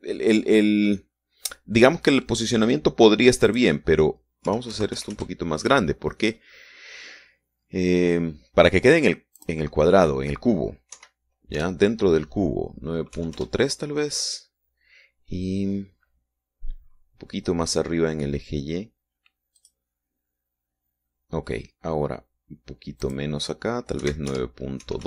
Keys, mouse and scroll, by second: 4.9 click, 5.8 KP_9, 6.1 KP_Decimal, 6.3 KP_5, 6.5 KP_Enter, 10.8 click, 12.3 Right, 12.9 BackSpace, 14.5 KP_3, 14.7 KP_Enter, 21.0 click, 24.4 click.